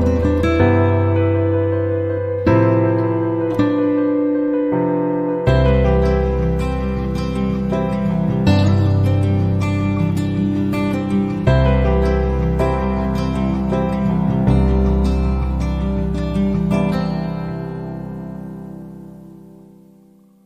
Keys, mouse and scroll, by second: 1.8 click, 3.0 click, 6.0 click, 7.2 middle click, 8.2 click, 10.1 click, 15.6 click, 17.7 click, 20.1 click.